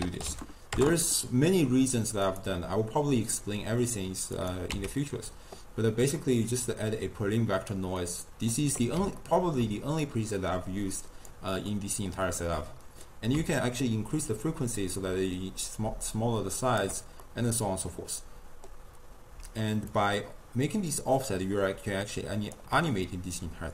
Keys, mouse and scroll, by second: 3.5 middle click, 4.4 click, 5.1 x, 6.2-8.6 middle drag, 8.6-9.2 scroll down 1, 9.2-10.1 ctrl+middle drag, 10.1 click, 11.7 middle click, 12.2-12.6 scroll up 2, 13.5-16.6 shift+drag, 17.3-19.9 middle drag, 19.9-22.9 shift+drag, 23.4-23.7 middle drag.